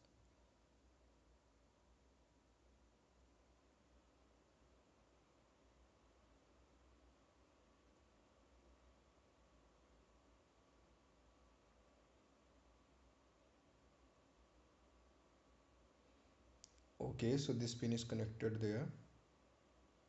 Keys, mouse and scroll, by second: 0.2-0.5 scroll up 1, 0.6 scroll down 1, 5.7 scroll down 1, 5.9 ctrl+click, 6.6 scroll down 1, 10.1 click, 14.8 scroll up 1, 16.8-17.5 ctrl+scroll up 1, 19.0 click.